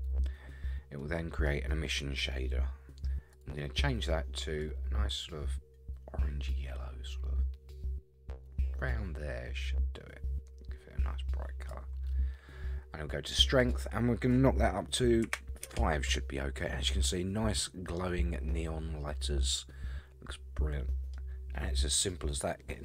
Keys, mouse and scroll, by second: 1.0-1.5 middle drag, 1.5-1.8 scroll up 5, 2.1-2.4 scroll down 1, 3.3 click, 13.6-16.2 drag, 17.5-17.8 scroll down 3, 18.0-21.1 middle drag, 21.5 scroll up 4, 21.9 scroll down 4.